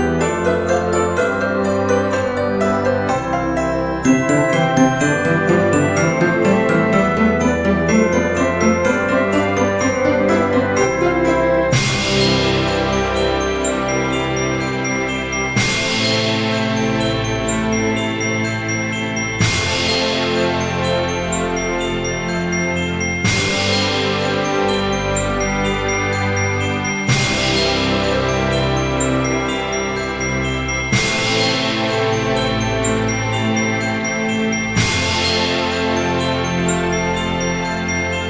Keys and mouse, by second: 0.2 click, 0.5 KP_5, 1.5 click, 3.1 click, 3.8 Tab, 5.0 click, 6.0 shift+click, 9.3 click, 11.7 middle click, 14.8 middle click, 16.1 click, 16.8 middle click, 19.2 F6, 20.6 shift+a, 22.4 shift+a, 24.1 shift+a, 26.8 click, 28.0 alt+z, 28.6 s, 29.6 click, 29.8 KP_7, 30.7 g, 32.2 click, 32.4 s, 33.2 click, 33.9 KP_3, 35.1 g, 35.4 y, 36.8 click, 37.1 alt+z, 37.5 middle click.